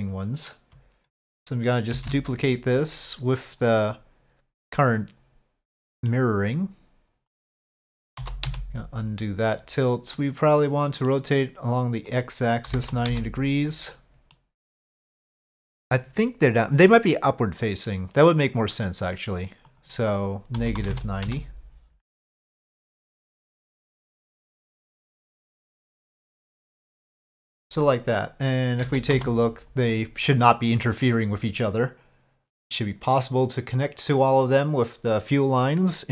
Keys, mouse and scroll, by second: 1.9 shift+d, 5.8 middle click, 7.3-8.7 drag, 10.1-11.1 middle drag, 12.1-13.7 drag, 13.9 middle click, 15.0 click, 19.7-22.1 drag, 22.6-23.1 middle drag, 23.9-25.3 drag, 25.7-27.1 middle drag, 27.7-28.2 middle drag, 28.8 z, 30.0-36.1 middle drag.